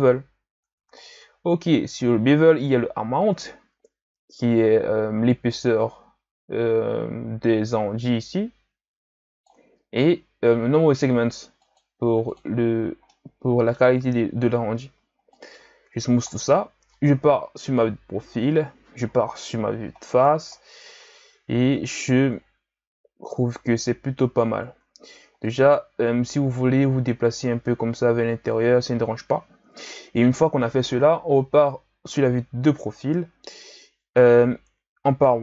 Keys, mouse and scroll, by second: 1.0-3.2 scroll down 3, 3.2-6.2 drag, 11.6-13.1 drag, 13.1-14.4 middle drag, 14.4 scroll up 2, 14.7 w, 16.2-17.5 scroll down 2, 17.5 KP_3, 18.4-19.3 scroll down 2, 19.3 KP_1, 20.0-21.3 scroll down 6, 21.3-24.7 scroll up 15, 24.7 Tab, 25.4-27.6 drag, 27.6 Tab, 27.8 a, 28.3-31.3 scroll down 4, 31.3 KP_3, 32.9-33.7 ctrl+scroll up 5, 33.7 Tab, 34.7 z.